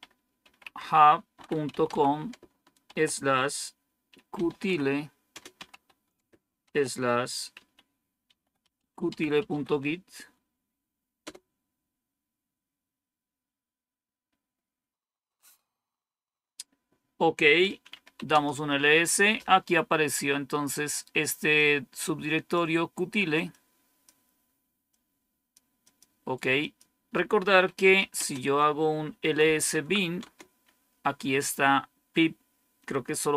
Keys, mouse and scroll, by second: 0.0-2.8 typing, 3.8-10.1 typing, 11.1 Return, 17.6-18.5 typing, 21.4-22.4 drag, 21.4 typing, 27.5-29.8 typing, 30.1 Return.